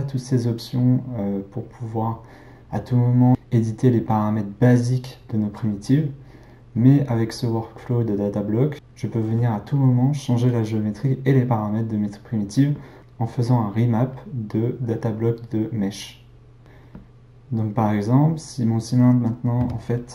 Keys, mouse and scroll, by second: 16.6 click, 19.2 click, 19.5 x.